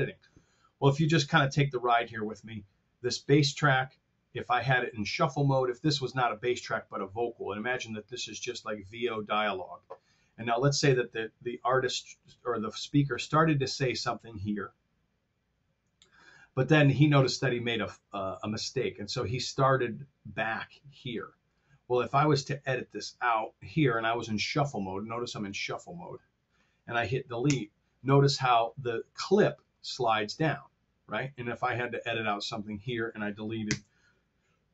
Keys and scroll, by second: 27.4 BackSpace.